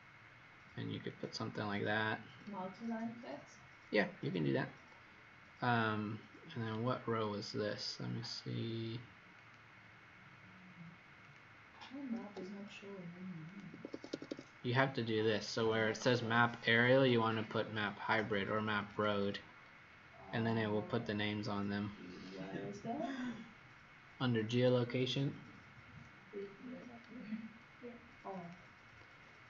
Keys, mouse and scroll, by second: 3.6-4.2 scroll up 4, 5.3 scroll up 2, 6.8-7.3 scroll down 1, 9.3 click, 12.3 Escape, 13.4 click, 13.6 Escape, 13.9 Escape, 15.4 click.